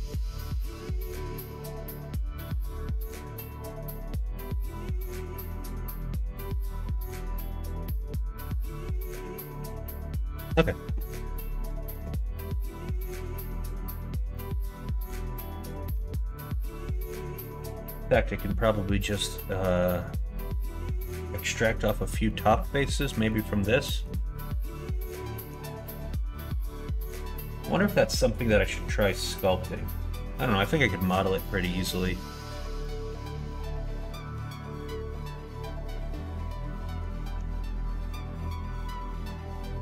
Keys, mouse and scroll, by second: 14.3 middle click, 15.0 click, 15.9 Tab, 16.7 middle click, 22.2 middle click, 23.3 middle click, 31.1 middle click, 32.1 middle click, 32.8-34.3 middle drag, 36.1 middle click, 37.3 Tab, 38.1 click, 38.5 middle click.